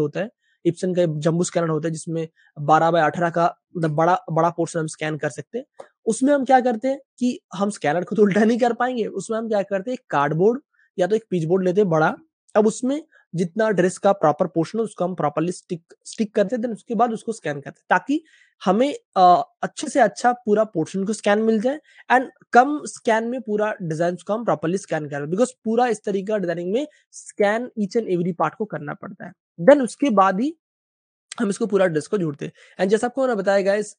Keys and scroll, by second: 26.2 Page_Down, 27.0 space, 28.5 space, 28.6 space, 28.7 space, 30.1 super+space, 30.6 space, 30.7 space, 32.1 super+space, 32.2 super+space, 33.8 Page_Up.